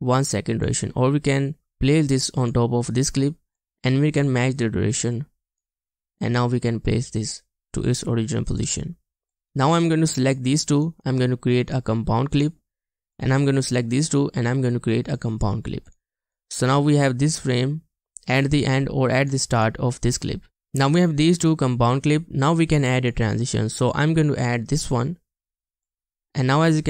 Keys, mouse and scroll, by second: 10.9 right click, 16.4 double click.